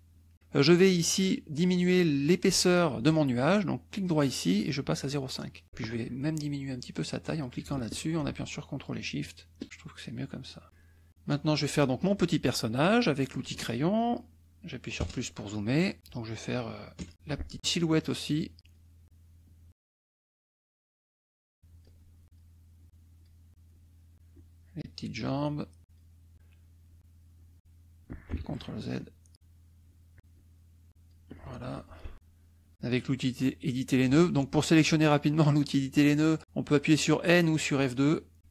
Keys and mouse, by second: 0.3 middle click, 0.6 click, 3.9 right click, 5.0 click, 7.0-10.2 drag, 10.4 click, 10.6 middle click, 13.3 click, 13.7 middle click, 15.0 KP_Add, 15.6 click, 17.0 KP_Add, 17.1 click, 18.4 shift+click, 19.0 shift+click, 20.1 shift+click, 20.7 shift+click, 21.6 shift+click, 22.2 shift+click, 22.7 shift+click, 23.6 shift+click, 24.3 shift+click, 25.1-26.1 shift+drag, 26.2 shift+click, 26.9 shift+click, 27.3 shift+click, 28.4 ctrl+shift+z, 29.0 shift+click, 29.8 shift+click, 30.3 shift+click, 31.4 shift+click, 32.1 F2, 32.1 click, 32.8 click.